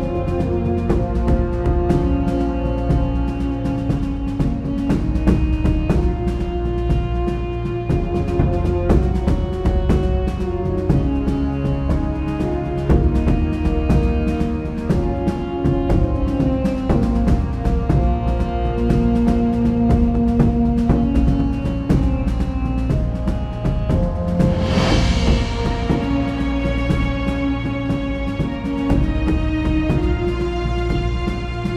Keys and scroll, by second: 3.7 super+z, 3.9 super+z, 7.6 super+z, 15.5-16.0 typing, 16.9 super+z, 17.2 typing, 20.4 Return, 23.4 q, 24.8 Tab, 25.2 q, 25.7 Tab, 26.9 Tab.